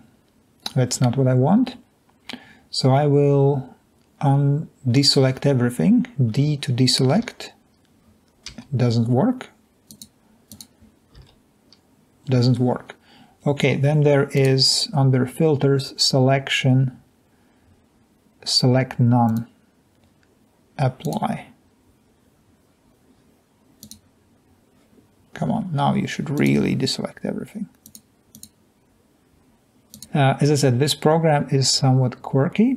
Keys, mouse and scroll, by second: 7.3 d, 8.7 d, 11.4 d, 21.0 click, 30.0 Escape.